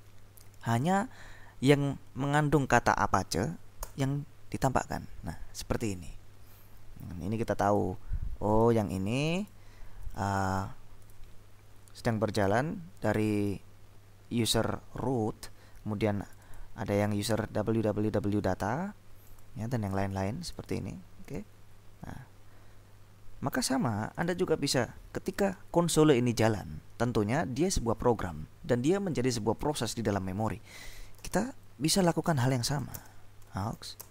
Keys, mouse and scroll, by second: 4.0 Return, 7.8 click, 8.6-11.1 drag, 13.2 click, 16.3 click, 19.3 click, 20.6 click, 21.3-21.9 scroll up 2, 24.2-24.9 scroll up 2, 31.1-34.1 typing.